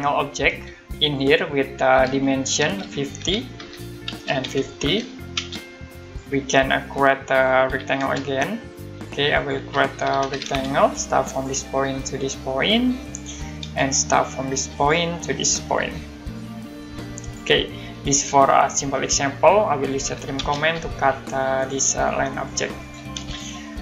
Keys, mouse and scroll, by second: 0.0-0.4 typing, 2.0-5.3 typing, 6.0 click, 6.4-7.0 scroll up 1, 7.0 middle click, 7.4-8.3 typing, 8.7 click, 9.5 Escape, 9.8-10.8 typing, 11.3 click, 13.0 click, 13.6 space, 14.7 click, 17.2 click, 19.5 middle click, 19.7-20.5 typing, 21.1 click, 23.1 space, 23.4 scroll down 1.